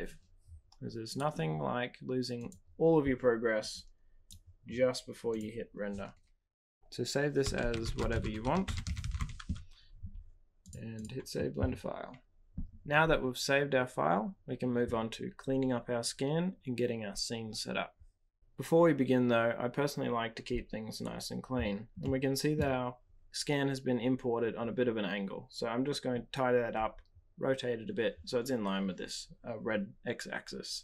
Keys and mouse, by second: 1.2-2.8 drag, 22.0-22.5 middle drag.